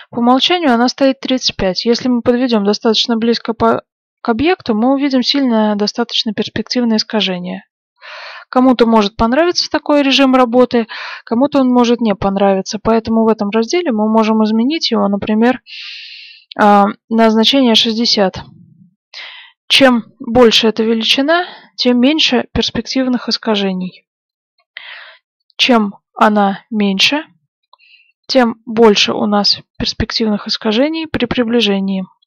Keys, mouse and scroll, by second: 0.6-2.5 middle drag, 2.5 scroll up 1, 2.6-6.8 middle drag, 7.3-9.3 middle drag, 11.4-12.1 scroll down 1, 12.1-13.0 scroll up 1, 13.0-13.7 scroll up 1, 13.7 scroll up 1, 15.0 click, 19.0-19.5 scroll down 1, 19.5-21.1 middle drag, 21.1-21.5 scroll up 1, 21.8-23.8 middle drag, 24.2 scroll up 1, 24.3-26.0 middle drag, 25.3 click, 27.9-31.4 middle drag.